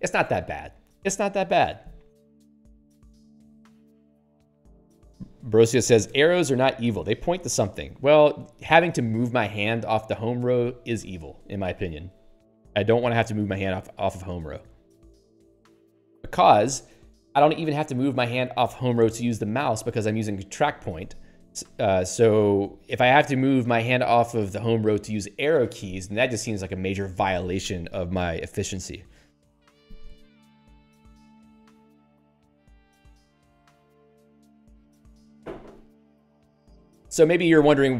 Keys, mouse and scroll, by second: 14.4 scroll down 3, 15.0 scroll down 1, 15.2 scroll up 3, 28.9 scroll up 1, 32.0 scroll up 1.